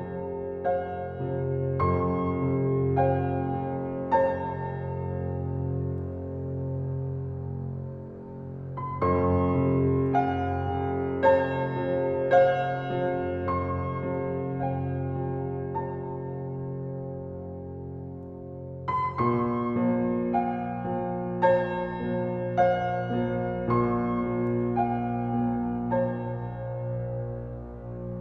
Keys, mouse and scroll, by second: 1.0-5.4 drag, 5.4-8.0 right drag, 8.0 click, 11.6 alt+click, 15.4 r, 16.4-21.5 drag, 21.5 alt+middle click, 22.1 alt+right click, 22.4 alt+click, 23.0 alt+middle click, 23.7 alt+right click, 23.9 alt+click, 24.2-26.3 alt+middle drag, 26.3-28.1 right drag, 28.1-28.2 drag.